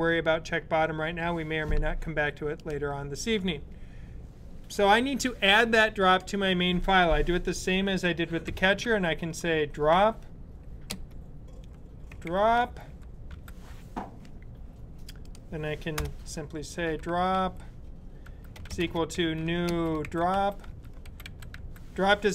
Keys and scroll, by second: 8.3-10.2 typing, 11.7-13.1 typing, 16.5-21.7 typing.